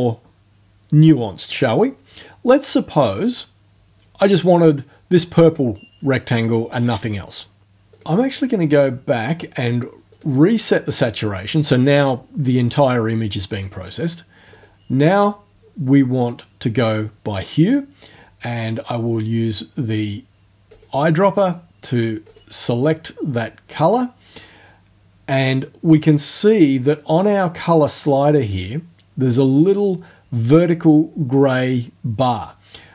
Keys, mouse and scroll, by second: 7.9 click, 9.1 click, 10.1 click, 14.5 click, 20.7 click, 22.3 click.